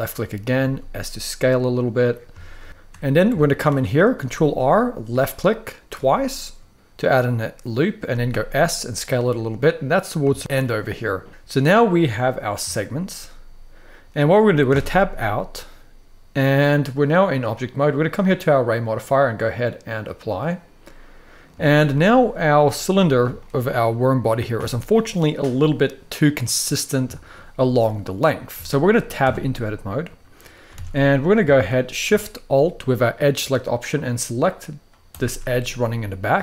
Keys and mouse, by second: 0.3 s, 1.6 click, 2.1 shift+middle click, 3.1 shift+middle click, 3.9 ctrl+r, 5.6 click, 7.8 s, 8.7 click, 10.1 shift+middle click, 12.4-12.8 shift+middle drag, 14.4 Tab, 14.9-16.5 middle drag, 18.6-19.9 drag, 20.5-21.1 middle drag, 21.3 shift+middle drag, 22.3-22.8 middle drag, 23.1 shift+middle drag, 24.2-25.1 middle drag, 26.8 shift+middle drag, 28.3 shift+middle drag, 28.9 Tab, 29.3-29.8 middle drag, 30.5 alt+a, 30.8 middle click, 31.2 shift+middle drag, 35.4 middle click.